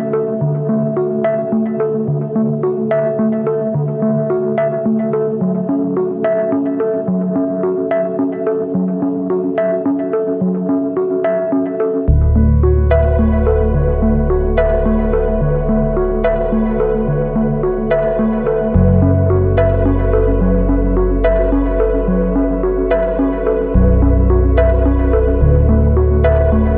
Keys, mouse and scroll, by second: 0.7 ctrl+=, 1.1 ctrl+=, 8.8 shift+click, 13.6 Left, 14.3 Up, 14.5 Up, 14.6 Up, 15.0 Up, 15.4 Down, 15.6 Down, 18.4 alt+BackSpace, 19.9 ctrl+d, 25.4 double click.